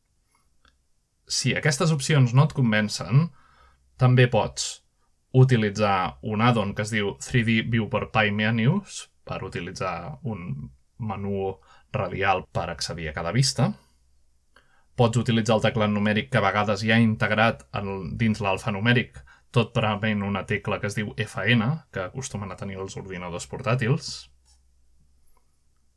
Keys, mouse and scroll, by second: 0.0-0.5 alt+middle drag, 3.7 alt+middle drag, 4.8-5.5 alt+middle drag, 7.2 middle click, 9.3-10.4 drag, 11.5 click, 12.6 click, 13.8-15.4 typing, 16.3 click, 17.3-18.5 drag, 20.2-21.0 drag, 22.4-23.1 middle drag, 23.5-24.1 shift+middle drag.